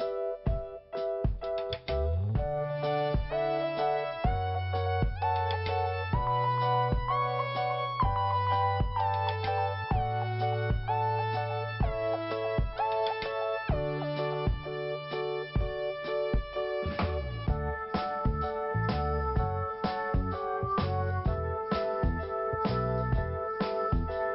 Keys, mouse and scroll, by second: 0.3 scroll up 1, 0.8 click, 2.3 scroll down 2, 3.0 click, 3.1 click, 3.3 click, 3.4 double click, 6.7 click, 6.8 click, 7.6 click, 7.7 click, 8.2 click, 8.3 double click, 8.6 scroll down 1, 9.6 click, 11.5 i.